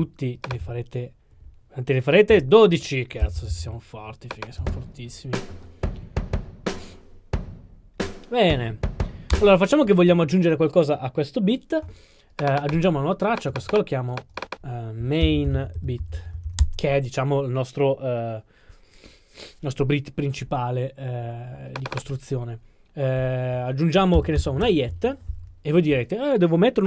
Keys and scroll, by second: 2.3 super+d, 15.2-16.6 typing, 16.6 Return, 24.2 typing, 24.6 Return.